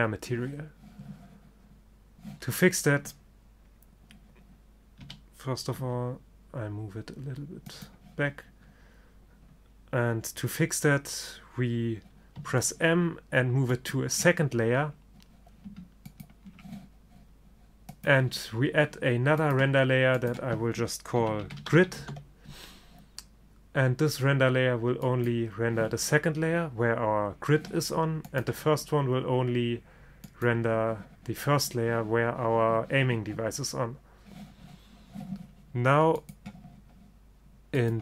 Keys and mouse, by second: 0.0 Escape, 1.3 click, 5.1 r, 12.4 m, 16.2-22.1 drag, 25.2-27.2 drag, 28.4-30.2 drag, 30.3-32.2 drag, 36.3-37.9 drag.